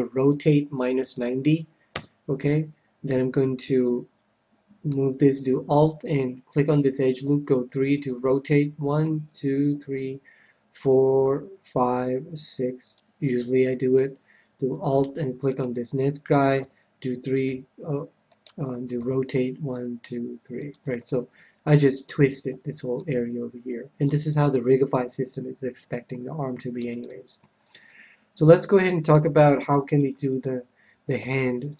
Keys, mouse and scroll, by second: 0.2 r, 3.8-5.4 middle drag, 6.0-7.9 right drag, 7.2 KP_3, 8.0 r, 12.9-14.5 drag, 13.3-15.0 middle drag, 15.4-17.4 right drag, 16.6 KP_3, 17.4 g, 18.5-20.1 right drag, 18.9 r, 20.7-22.4 drag, 21.0-22.9 middle drag, 22.4 a, 23.0-26.6 middle drag, 26.8 KP_1, 27.4 click, 28.2-30.3 middle drag, 29.4 a, 29.6 a, 31.1 c.